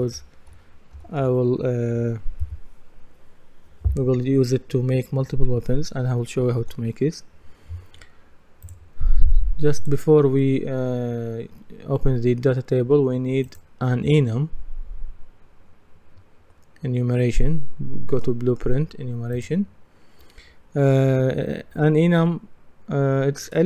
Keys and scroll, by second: 0.3-1.7 typing, 6.6 Return.